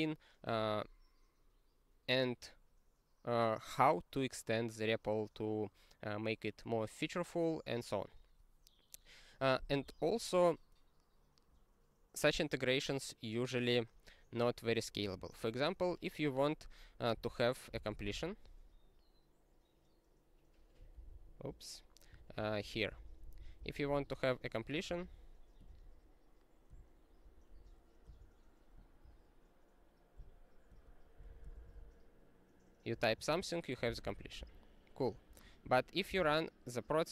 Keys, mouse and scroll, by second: 15.1 super+f, 17.1-18.6 typing, 21.2 ctrl+s, 22.2 ctrl+p, 22.3 ctrl+p, 22.6 ctrl+p, 22.8 ctrl+n, 23.0 ctrl+n, 23.2 ctrl+n, 23.4 ctrl+n, 24.8 Return, 26.7 (, 28.0 s, 30.2-33.9 typing, 34.1 ctrl+a, 34.3 ctrl+k, 35.2 ctrl+p, 35.6 ctrl+e.